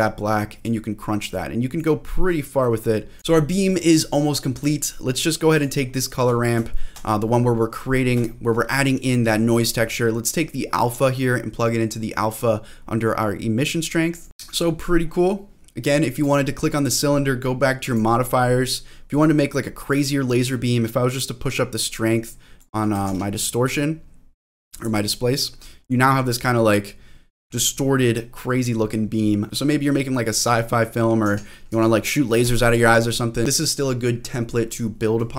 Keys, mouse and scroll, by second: 1.3 click, 2.3 click, 3.2-3.8 scroll down 2, 5.5 click, 6.7 shift+middle click, 7.7-8.2 scroll up 4, 8.2 shift+middle click, 8.6-9.4 scroll up 2, 9.9-10.8 scroll down 1, 10.8-14.3 drag, 14.3 scroll down 1, 15.0 scroll down 1, 15.3 scroll up 1, 16.2 click, 17.9 click, 19.1-22.6 drag, 23.1 ctrl+z, 23.6-24.8 drag, 25.1 click, 25.5 scroll down 1, 25.8 scroll up 1, 27.2 middle click, 27.5-27.8 scroll down 1, 27.8 middle click, 28.3-28.8 scroll up 3, 29.1 scroll down 2, 31.2 ctrl+z, 31.7 ctrl+z, 32.7 click, 33.4 scroll up 4.